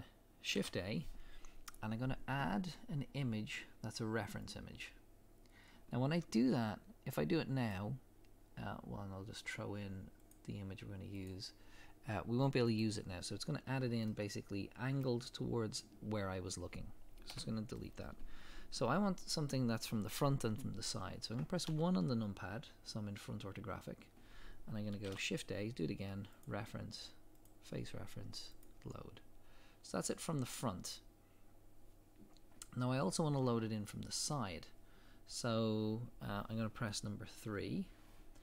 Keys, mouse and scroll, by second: 0.6 shift+a, 12.8-14.1 drag, 14.1-26.4 middle drag, 17.3 Delete, 21.7 KP_1, 28.6 click, 29.7 scroll up 1, 34.3 scroll down 1, 37.4 KP_3.